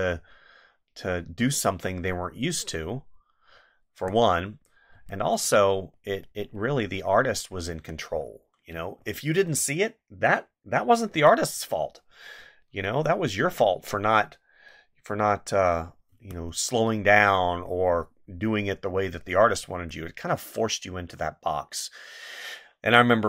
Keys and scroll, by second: 4.0 space, 7.7 space, 11.1 space, 16.1 space, 19.7 space.